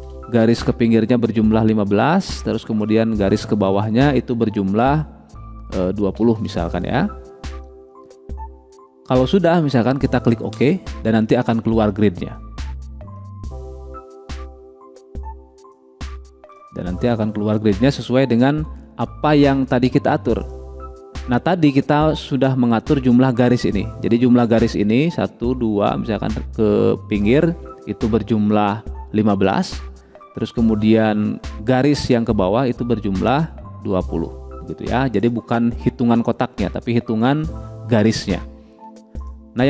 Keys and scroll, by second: 0.5 1, 0.6 5, 6.6 2, 6.8 0.